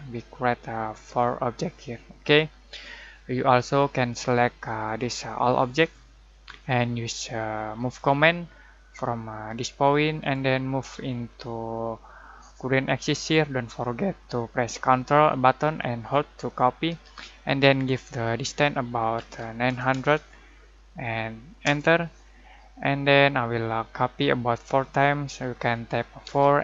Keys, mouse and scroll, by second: 3.6-7.8 drag, 10.2 click, 18.9-20.4 typing, 21.6 Return, 26.2 Return.